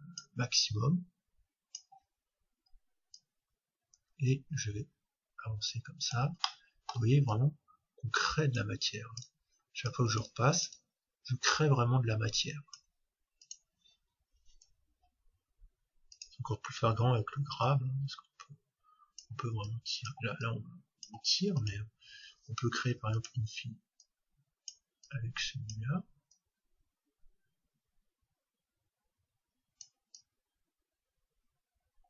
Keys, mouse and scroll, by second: 2.6-3.2 scroll up 1, 3.2-5.0 drag, 6.4-8.3 middle drag, 7.3-12.6 drag, 13.4-15.3 drag, 17.7-19.5 drag, 19.7-23.4 drag, 24.0-28.2 drag, 30.2-32.0 drag.